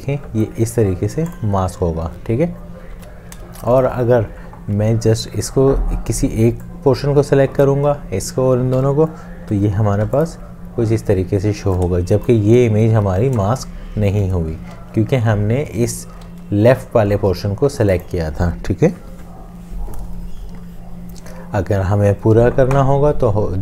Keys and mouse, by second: 3.0 ctrl+z, 9.5 ctrl+7, 12.0 shift+click, 14.7 ctrl+z.